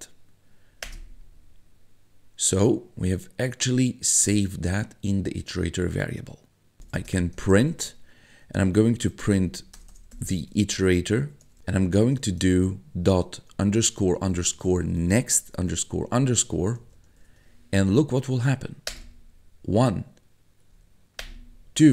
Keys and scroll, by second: 0.8 Return, 6.5-12.4 typing, 13.5-16.5 typing, 18.9 Return, 20.7 Up, 21.2 Return.